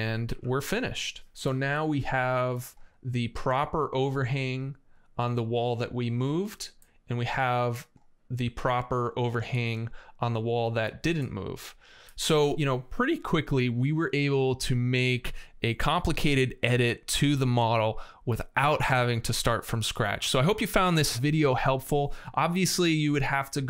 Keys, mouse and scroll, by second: 0.1 Escape, 1.9 middle click, 2.7 right click, 6.5-6.9 scroll down 1, 6.6 middle click, 6.7 click, 6.9 middle click, 10.2 scroll down 1.